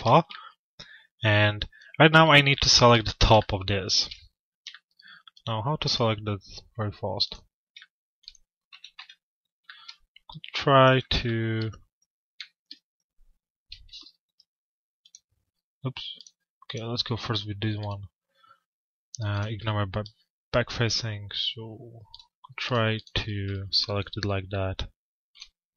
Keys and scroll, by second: 8.3 f, 8.9 z, 13.2 F4, 17.3 F4, 23.0 F4.